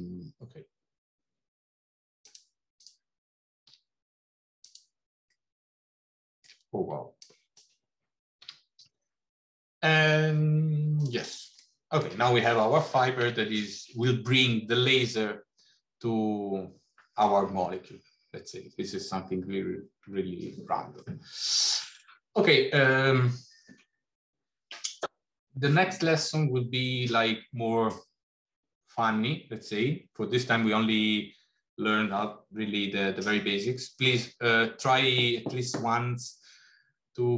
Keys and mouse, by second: 3.6 r, 5.4-6.4 middle drag, 7.0 click, 8.3 g, 11.1 click, 11.6 middle click, 13.1 Tab, 21.1-21.5 middle drag, 22.1 middle click.